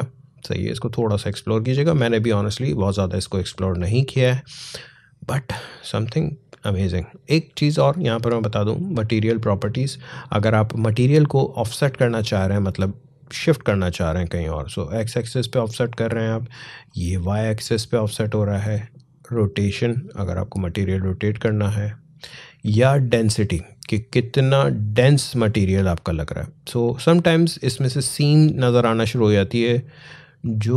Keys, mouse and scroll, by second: 0.0-0.6 scroll down 1, 3.9-5.7 scroll up 1, 6.3 scroll down 1, 12.0-16.7 drag, 16.7-19.3 drag, 19.3-30.2 drag, 30.2-30.7 drag.